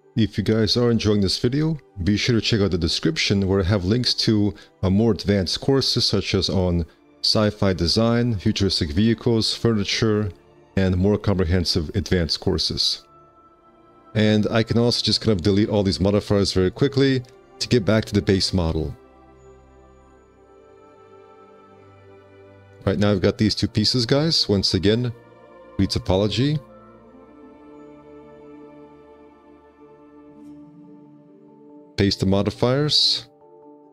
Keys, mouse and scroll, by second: 3.3 space, 3.3 1, 5.3 F4, 6.1 F4, 7.9 a, 13.2 5, 18.3-18.9 scroll, 19.3 alt+q, 19.5 scroll, 20.1 alt+q, 22.8 alt+q, 28.0 5.